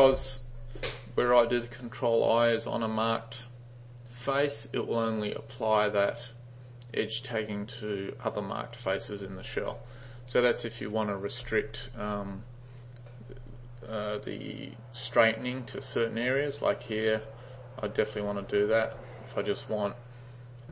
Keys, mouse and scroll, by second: 16.4-20.7 typing.